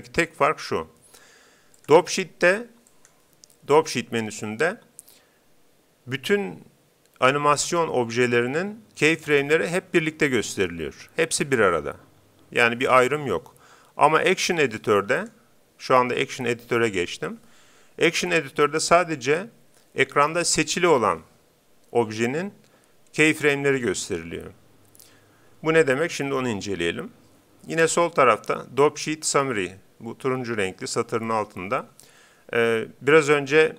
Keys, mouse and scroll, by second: 1.8-3.5 drag, 14.0-16.0 drag.